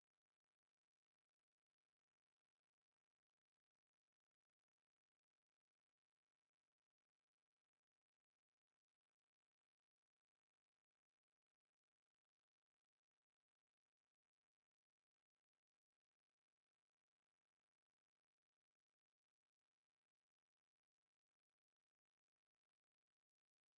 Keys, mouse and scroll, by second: 1.8 right click, 2.5-3.5 middle drag, 3.6 click, 3.6 right click, 3.8 click, 4.3 right click, 5.6 middle click, 5.9 click, 7.4 right click, 8.2 b, 9.5 click, 11.2 Tab, 11.3 middle click, 12.2 Tab, 12.8 right click, 13.7 click, 14.7 Tab, 15.4 Tab, 16.5 space, 18.9 g, 21.8 Tab, 22.7 right click.